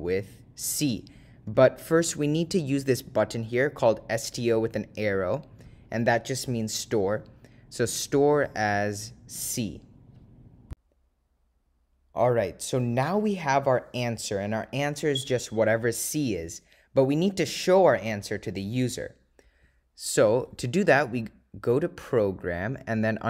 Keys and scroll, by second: 20.3 Return, 22.9 Right.